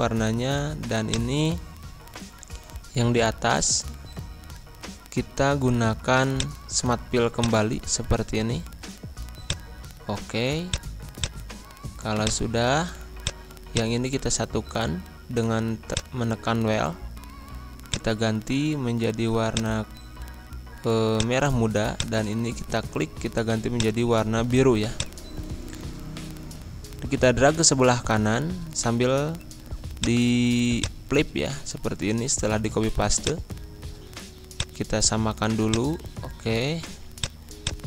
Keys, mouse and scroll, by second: 0.4 z, 1.0-3.7 drag, 3.7 Pause, 6.3 click, 13.6 click, 14.4 ctrl+z, 15.9 click, 25.4-26.7 scroll up 1, 27.2 ctrl+c, 27.9 ctrl+v, 29.9-32.6 drag, 32.6 scroll up 1, 33.1-34.5 drag, 35.6 click, 36.7 ctrl+z, 37.2-37.8 drag.